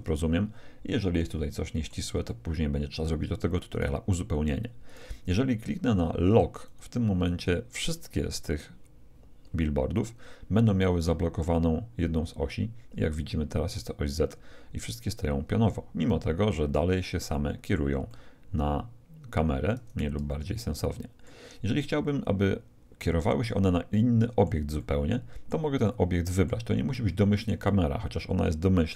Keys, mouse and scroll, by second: 2.2-4.1 middle drag, 3.7-6.6 right drag, 6.6-8.3 drag, 11.0-13.0 middle drag, 17.3-20.0 middle drag, 20.2-22.0 middle drag, 23.9-28.9 middle drag.